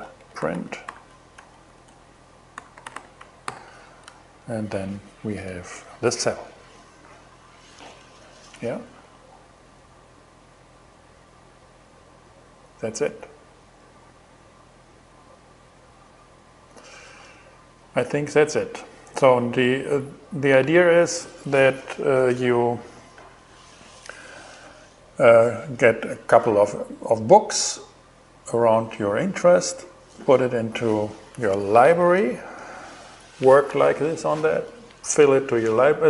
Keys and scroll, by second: 0.0-3.0 typing, 3.6 alt+shift+g, 4.3 shift+Return.